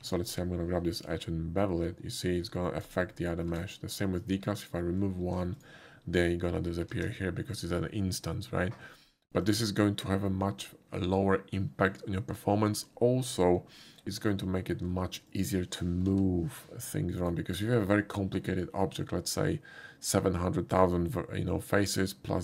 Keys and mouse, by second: 0.3 click, 1.1 ctrl+b, 2.9 right click, 3.5 Tab, 4.7 click, 5.3 x, 5.6 click, 9.5 click, 14.3-14.8 shift+middle drag, 15.3 shift+click, 16.1 g, 17.2 right click.